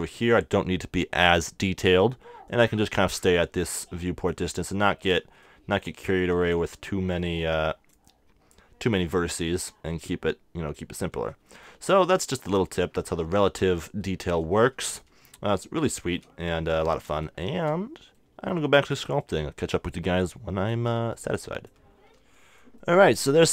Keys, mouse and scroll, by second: 2.5-14.0 drag, 9.4-11.4 middle drag, 11.5 middle click, 12.1-19.2 middle drag, 19.2-22.8 drag.